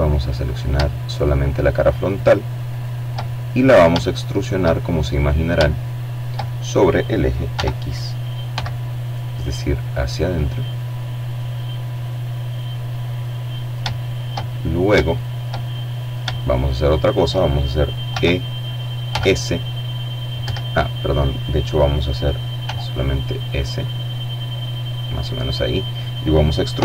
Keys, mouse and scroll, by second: 0.2 right click, 1.3 click, 1.3 middle click, 1.3 right click, 2.2 shift+middle click, 2.9 shift+middle click, 3.8 shift+middle click, 5.6 e, 6.6 x, 11.0 click, 11.6 middle click, 12.1 shift+middle click, 12.6 shift+middle click, 13.2 shift+middle click, 13.8 shift+middle click, 14.4 shift+middle click, 16.2 e, 17.2 s, 18.5 Escape, 20.8 s, 23.2 click, 24.8 e.